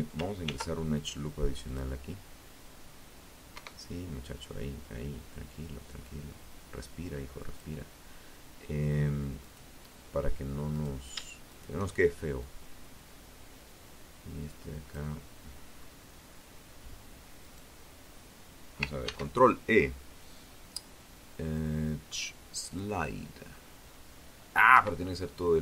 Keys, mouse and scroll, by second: 1.7 Escape, 2.7-5.9 drag, 7.5 right click, 8.9 right click, 9.6 shift+right click, 10.5-13.3 drag, 13.9 scroll up 2, 15.6 right click, 17.2 ctrl+e, 20.9 click, 22.9 Escape, 23.9-25.6 drag.